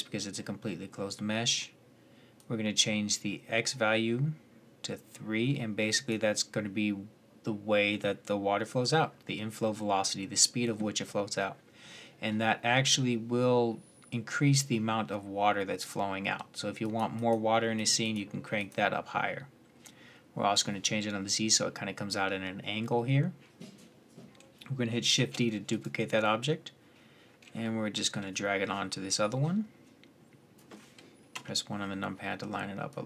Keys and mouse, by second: 4.2-16.6 middle drag, 25.0 shift+d, 28.9-30.3 drag, 31.1 KP_1, 32.7 click.